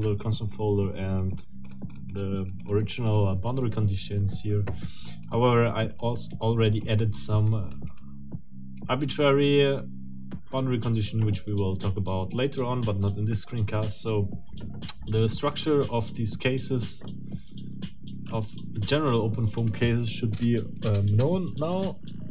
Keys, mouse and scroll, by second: 1.2 click, 3.1 click, 5.2 click, 5.9 click, 6.8 click.